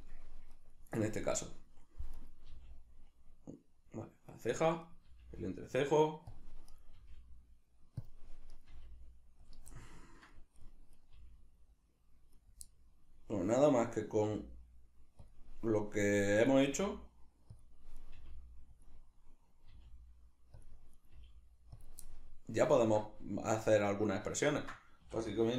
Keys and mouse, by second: 0.6 right click, 2.2 right click, 2.5 g, 4.4 right click, 5.1 g, 6.4 click, 6.8 right click, 7.0 g, 8.1 click, 8.6 right click, 8.7 g, 9.5 click, 9.8-11.0 ctrl+middle drag, 11.0 right click, 11.2 g, 12.4 right click, 12.7-13.8 middle drag, 13.8 right click, 14.3 g, 16.5 right click, 16.6 g, 17.6 click, 18.0 right click, 18.1 g, 18.8 click, 19.7 g, 20.6 click, 21.0 right click, 21.1 g, 21.8 click, 22.1-25.5 middle drag, 25.0 a.